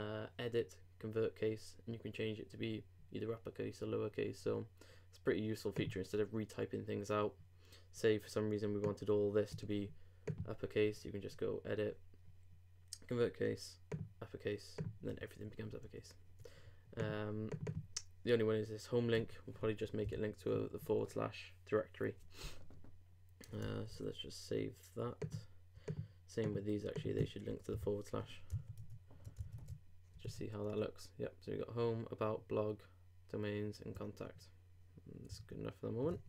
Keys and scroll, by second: 15.8 super+z, 20.0 alt+/, 23.9 super+s, 27.7 super+/, 28.5 super+/, 28.8 super+Tab, 30.2 super+r, 35.4 super+Tab.